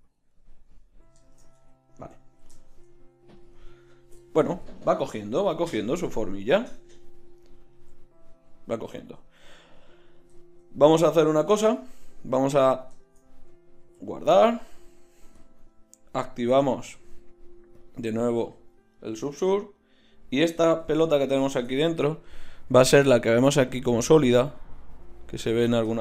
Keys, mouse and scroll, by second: 1.5 Tab, 13.8 ctrl+s, 18.5-19.0 drag, 19.7-21.0 right drag.